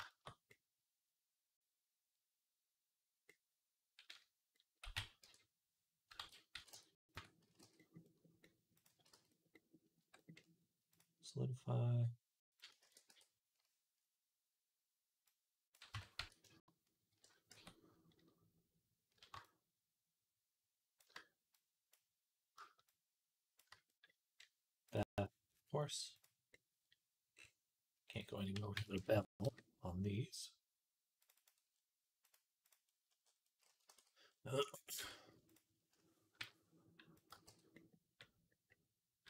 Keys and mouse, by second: 4.7 x, 6.0 ctrl+z, 6.4 x, 6.9 click, 7.3-10.8 middle drag, 7.3 x, 9.0 x, 9.8 Tab, 10.8-32.8 drag, 12.7 ctrl+a, 15.8 Tab, 16.0 a, 16.9 shift+n, 17.4 Tab, 29.0 KP_0, 32.1 right click, 33.3-36.2 middle drag, 33.8 ctrl+s, 34.8 Tab, 36.2 i, 37.2 x, 37.6-39.2 right drag.